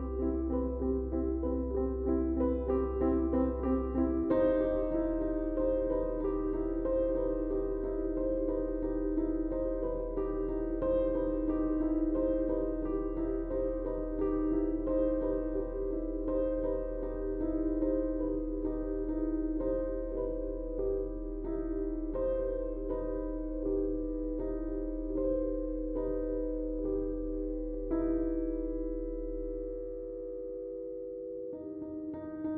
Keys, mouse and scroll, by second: 6.9 space, 8.1-16.8 drag, 14.5 typing, 17.0 space, 17.2 click, 21.0-29.3 drag.